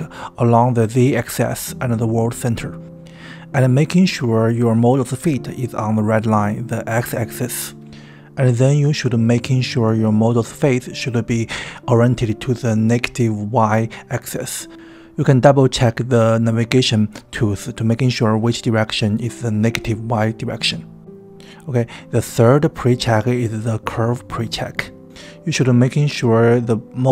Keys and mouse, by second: 10.9-12.0 middle drag, 14.6-15.0 middle drag, 15.9-16.5 middle drag.